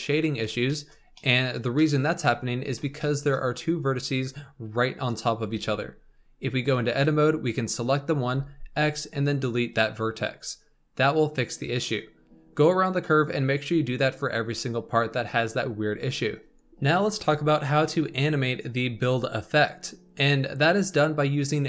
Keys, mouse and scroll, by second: 0.6-2.2 shift+middle drag, 2.2-2.9 scroll up 3, 2.9-5.5 shift+middle drag, 5.5 Tab, 6.6 click, 8.3 x, 12.1-15.2 scroll down 3, 16.5-19.1 shift+middle drag.